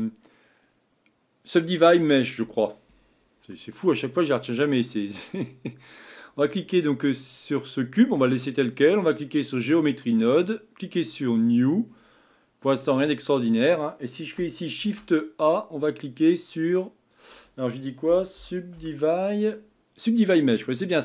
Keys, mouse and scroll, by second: 4.6-5.9 drag, 7.2-9.6 middle drag, 9.6 click, 11.3-21.0 drag.